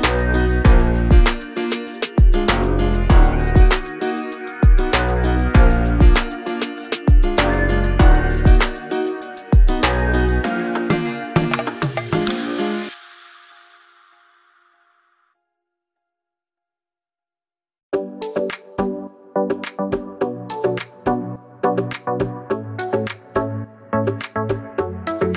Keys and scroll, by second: 4.9 BackSpace, 9.7-11.6 typing, 13.5 Return.